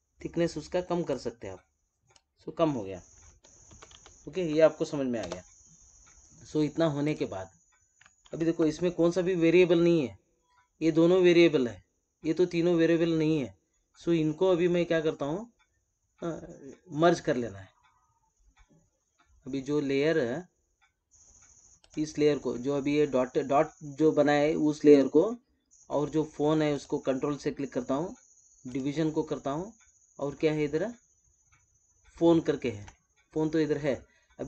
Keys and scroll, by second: 3.6 ctrl+-, 8.2 ctrl+-.